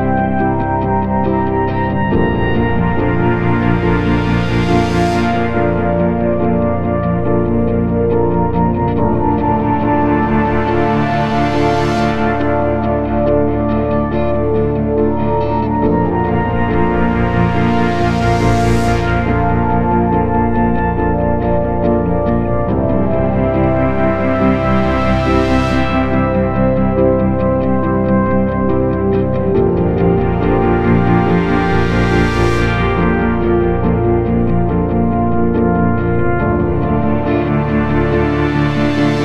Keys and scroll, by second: 10.4 shift+Page_Down, 29.3 Caps_Lock, 29.8-32.3 typing.